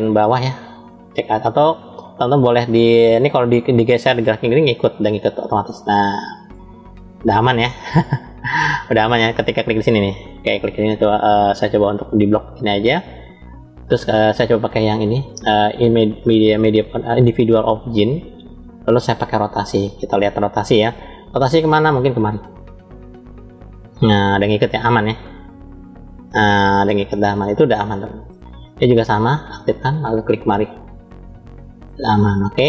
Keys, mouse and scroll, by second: 7.2-7.9 right drag, 7.9-9.8 scroll up 2, 9.8 click, 10.6 shift+click, 12.1-13.0 drag, 14.1-18.0 drag, 20.5 click, 22.2 click, 27.7 ctrl+z, 28.5-29.4 drag, 30.6 click, 30.8 click.